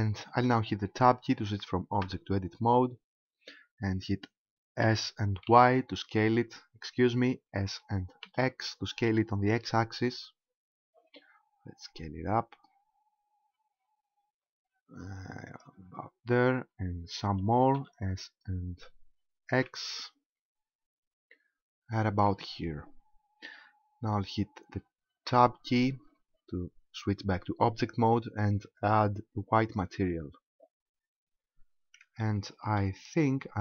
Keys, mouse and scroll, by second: 2.0 Tab, 4.8 s, 15.6 ctrl+click, 17.4 s, 22.2 ctrl+click, 25.3 Tab, 28.8 click, 31.0-32.2 scroll up 1, 32.2 shift+middle click, 33.0-33.6 scroll up 4.